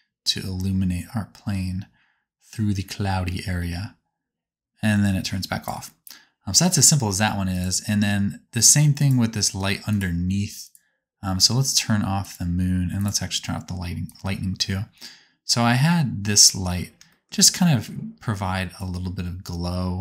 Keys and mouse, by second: 1.3-3.7 drag, 3.7-6.4 right drag, 6.4-7.5 drag, 7.5-8.9 middle drag, 8.9 click, 9.0 middle click, 9.8 click, 9.9 middle click, 10.6 click, 10.7-12.1 middle drag, 12.1 click, 12.9 click, 14.0-20.0 drag.